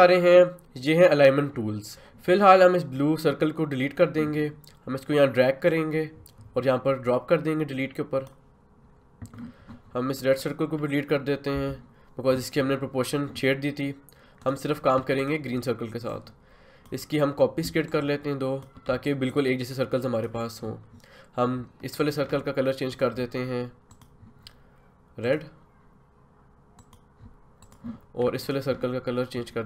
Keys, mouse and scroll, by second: 1.9 ctrl+z, 5.7-10.4 drag, 11.5 Delete, 14.4-29.6 drag.